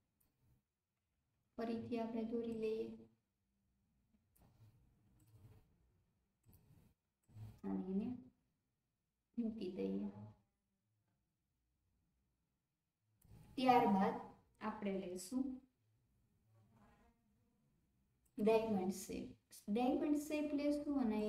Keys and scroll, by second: 1.0 ctrl+z.